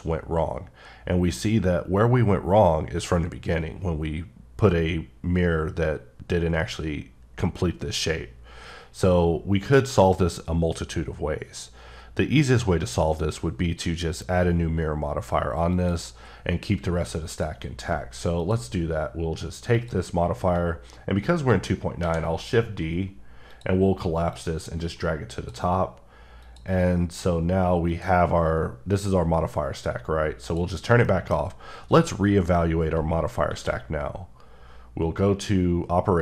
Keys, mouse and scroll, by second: 0.2-0.6 scroll down 1, 0.7-1.3 scroll up 1, 1.3-2.0 scroll down 1, 2.0-2.6 scroll down 6, 8.7-9.3 scroll down 10, 9.3-9.9 scroll up 6, 9.9-11.1 scroll down 8, 11.1-11.8 scroll up 7, 11.8-12.5 scroll down 3, 12.5-13.3 scroll up 5, 13.3-15.3 scroll down 5, 15.7 click, 17.3 click, 18.4 click, 19.7 click, 21.9 d, 23.5 click, 24.3 click, 26.4 click, 27.9 click, 30.5 click, 31.0 middle click, 33.5 q.